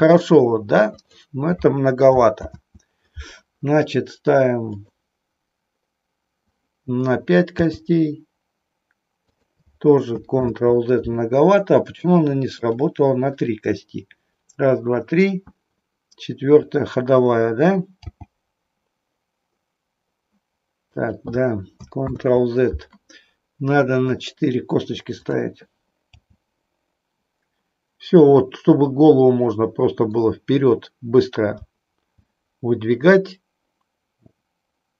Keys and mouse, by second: 0.9 click, 2.4 ctrl+z, 4.7 click, 7.6 g, 10.4 ctrl+z, 13.4 click, 18.1 g, 20.8 click, 22.1 ctrl+z, 24.1 click, 26.2 g, 31.6 g, 32.2 g.